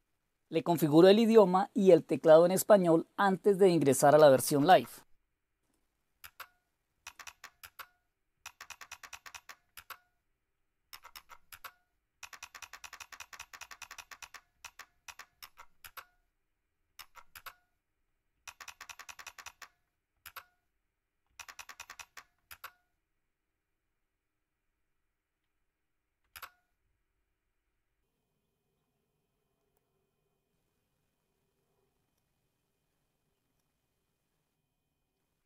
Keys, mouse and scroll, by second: 0.0 Down, 0.0 Return, 4.1 Up, 4.4 Up, 4.6 Up, 6.1 Return, 6.9 Down, 7.2 Down, 7.5 Return, 8.3 Down, 8.6 Down, 8.8 Down, 9.0 Down, 9.2-9.9 typing, 9.2 Down, 9.7 Return, 10.8 Up, 11.0 Up, 11.3-14.4 typing, 11.4 Return, 12.1 Down, 14.5 Down, 15.0 Down, 15.3 Up, 15.5-17.4 typing, 15.7 Return, 17.2 Return, 18.4 Down, 18.6-20.4 typing, 19.0 Down, 21.3 Down, 21.7 Down, 22.4 Return, 26.2 Return.